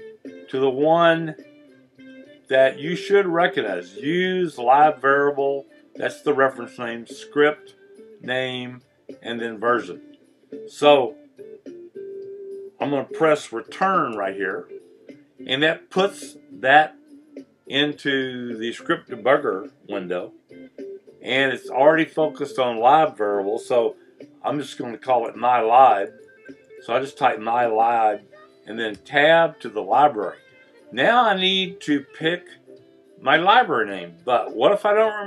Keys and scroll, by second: 14.1 Return, 25.2-26.9 typing, 29.0 Tab.